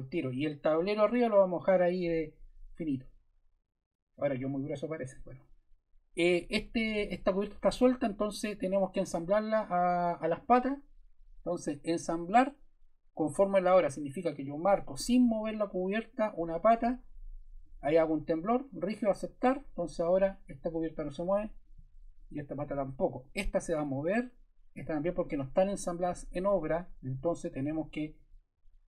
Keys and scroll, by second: 7.8 super+Caps_Lock, 8.0 super+z, 27.1 super+Caps_Lock, 27.3 super+z, 28.5 super+z.